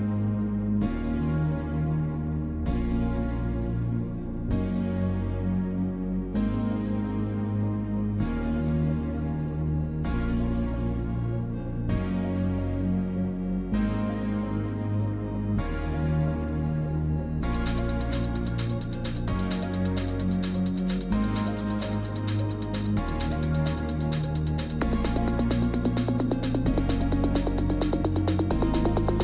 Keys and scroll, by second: 13.2 ctrl+t, 23.0 ctrl+g, 28.7 ctrl+j.